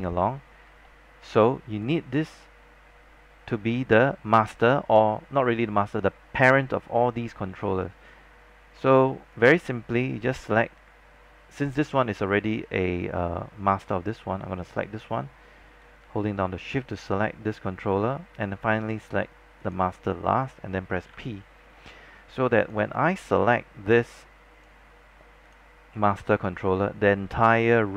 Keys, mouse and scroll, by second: 1.1 alt+middle click, 1.8 click, 17.0 shift+click, 19.7 shift+click, 21.2 shift+p, 22.7-27.9 drag.